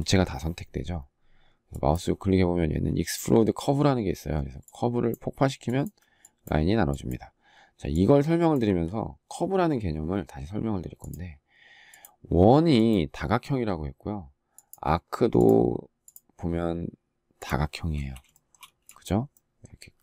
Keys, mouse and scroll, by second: 8.4 Delete, 18.1 shift+middle click, 18.4 space.